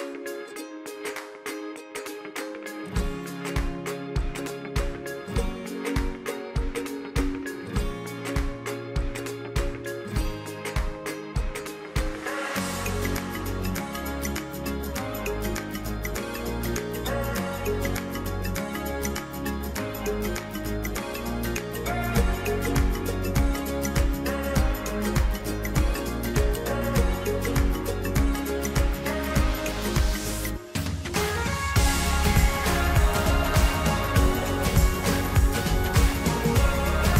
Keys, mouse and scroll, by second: 2.5-5.1 middle drag, 5.1 click, 8.0 middle click, 8.9-10.9 drag, 10.9-11.8 shift+middle drag, 12.5-13.8 middle drag, 14.5 middle click, 15.5 middle click, 16.6 middle click, 17.8 middle click, 18.9 middle drag, 19.2-20.4 middle drag, 20.7-21.1 middle drag, 23.1 click, 24.4 middle click, 25.3 click, 25.5-26.6 middle drag, 27.9 middle click, 28.8 middle click, 29.7 middle click, 30.4 click, 31.1 middle click, 31.4 scroll down 1, 31.7 middle click, 32.4 scroll down 1, 32.7-33.7 middle drag, 33.9 middle click, 34.8 scroll down 1, 35.3-35.9 middle drag, 35.9-36.4 scroll up 1, 36.4-37.1 middle drag.